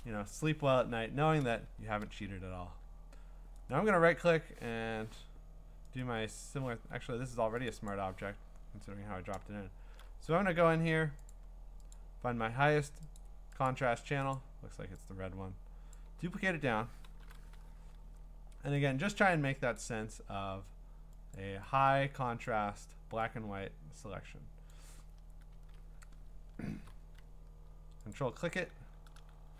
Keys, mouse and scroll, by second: 3.7 right click, 4.7 Escape, 6.0 right click, 6.7 Escape, 7.7 click, 8.1 click, 8.9-9.8 scroll, 11.3 click, 11.9 click, 13.2 click, 13.7 click, 14.3 click, 15.9 click, 17.2 ctrl+i, 19.8 click, 21.3 click, 24.7 click, 25.6 Return, 26.6 scroll, 28.1 ctrl+click.